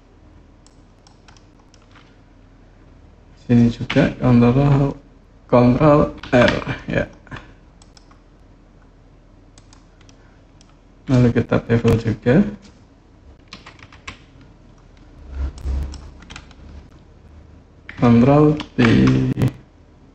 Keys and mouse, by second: 0.4 click, 1.2 click, 6.0 ctrl+r, 9.3 click, 10.0 click, 10.0 right click, 13.3 KP_3, 13.7 KP_1, 15.4 click, 18.4 ctrl+b.